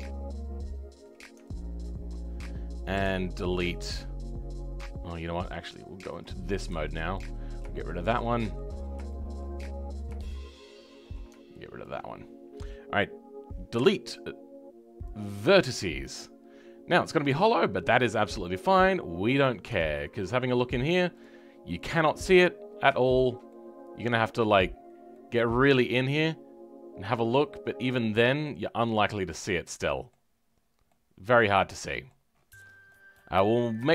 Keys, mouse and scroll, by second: 1.8 ctrl+click, 7.3-7.7 scroll down 2, 7.7-8.7 shift+middle drag, 8.7-9.0 scroll down 2, 9.0 shift+middle click, 9.6-10.1 scroll up 2, 10.1-11.8 shift+middle drag, 11.8 ctrl+click, 15.1 Delete, 15.5-15.9 scroll down 2, 15.9-19.2 middle drag, 19.2 click, 19.9-21.2 middle drag, 21.2 click, 21.6 middle click, 22.6-22.9 scroll up 3, 22.9-24.7 shift+middle drag, 24.7-25.1 scroll up 2, 25.1-30.5 middle drag, 30.5-30.8 scroll down 1, 30.8-32.3 middle drag, 32.3 scroll down 5, 32.8 middle click, 33.3-33.8 scroll up 6, 33.8-33.9 shift+middle drag.